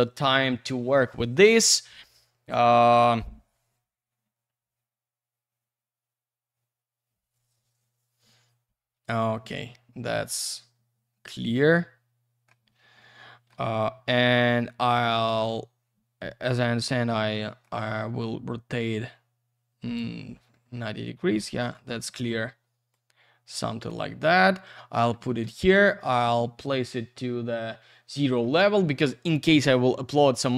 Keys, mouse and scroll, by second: 9.1 click, 9.5-10.3 scroll down 1, 11.3 alt+middle click, 13.0 alt+middle click, 14.4 click, 15.0 Escape, 16.0-16.4 scroll down 1, 16.4 F3, 18.2 click, 20.2 scroll down 1, 20.5 alt+middle click, 21.4 F3, 22.0 middle click, 22.9 click, 24.1 alt+middle click, 25.2 alt+w, 26.0 alt+w, 26.3 alt+z, 26.9 scroll up 1, 28.2 middle click.